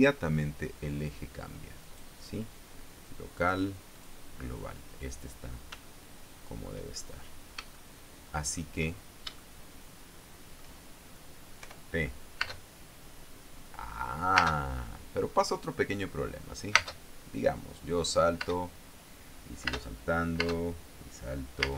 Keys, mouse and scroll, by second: 2.3 right click, 3.9 click, 4.4 click, 5.7-6.2 scroll down 1, 6.4 shift+middle click, 7.3 shift+click, 7.5-8.1 shift+scroll up 4, 8.3-9.3 shift+drag, 9.5 shift+scroll up 1, 9.9-11.3 shift+drag, 12.1 p, 12.9 space, 14.9 space, 17.3 space, 19.0 space, 20.2 space, 20.9 space.